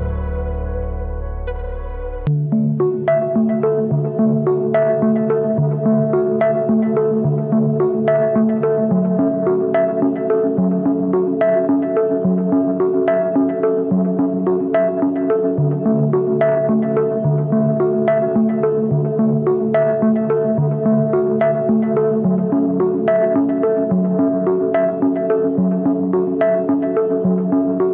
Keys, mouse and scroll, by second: 1.8-2.3 typing, 2.5 double click, 5.4 ctrl+=, 5.5 ctrl+=, 5.8-6.2 ctrl+scroll down 1, 6.2 double click, 11.8 ctrl+-, 12.1 ctrl+-, 13.7-14.2 alt+scroll up 1, 26.2-27.0 scroll down 1.